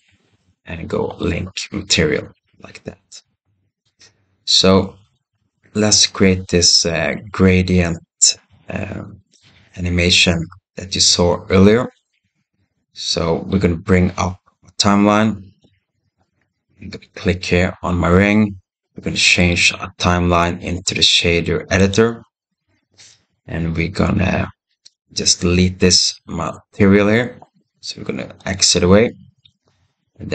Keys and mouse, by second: 3.9 click, 4.5 x, 13.4-15.6 drag, 17.0 click, 19.2-21.8 drag, 28.4 click.